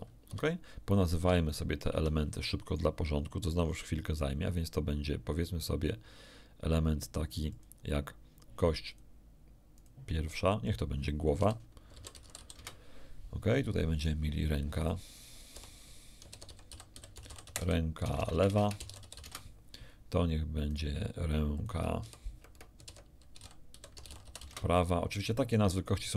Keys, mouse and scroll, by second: 0.2 Escape, 1.4 shift+middle click, 2.6 shift+right click, 3.5 click, 7.4 click, 8.8 click, 9.7 click, 10.6 click, 11.4-12.3 typing, 12.5 Return, 14.0 right click, 14.8 click, 15.5-19.1 typing, 19.8 Return, 20.6 right click, 21.5 click, 22.0-24.4 typing, 25.1 Return.